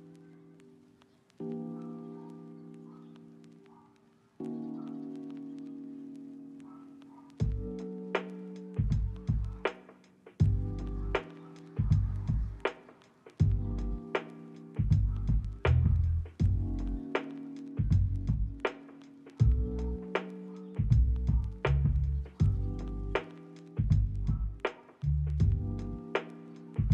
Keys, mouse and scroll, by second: 0.8 s, 1.5 ctrl+middle click, 2.1 s, 2.3 right click, 3.5 double click, 5.4 double click, 7.2 double click, 11.0 middle click, 11.4 middle click, 11.7 ctrl+middle click, 12.5 shift+middle click, 12.9 s, 13.1 right click, 14.0 middle click, 14.5 ctrl+middle click, 14.9 double click, 18.6 ctrl+z, 18.7 ctrl+z, 19.3 ctrl+z, 19.5 double click, 21.4 middle click, 21.9 double click.